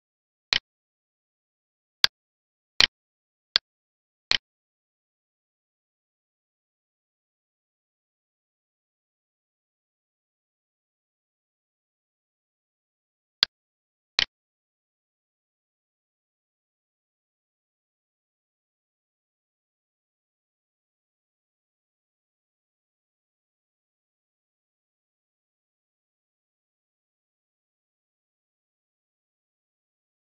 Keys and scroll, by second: 10.7 alt+e.